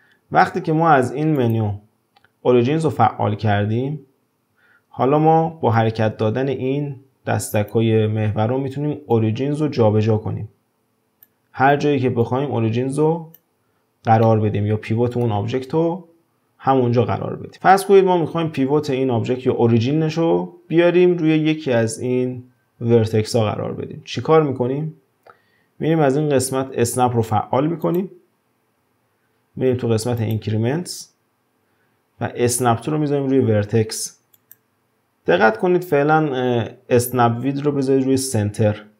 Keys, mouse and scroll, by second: 1.4-4.4 drag, 5.8-8.8 drag, 9.1-12.1 drag, 12.2-14.2 drag, 14.2-17.3 middle drag, 27.8 click, 30.2-33.2 drag.